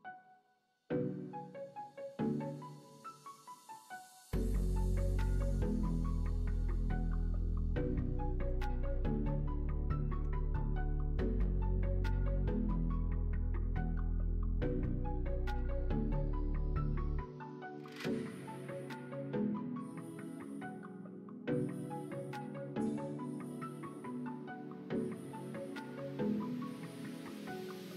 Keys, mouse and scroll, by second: 2.5 click, 3.8 click, 8.4 click, 9.0 middle click, 9.5 click, 9.8 middle click, 13.9 middle click, 15.5 2, 16.1 click.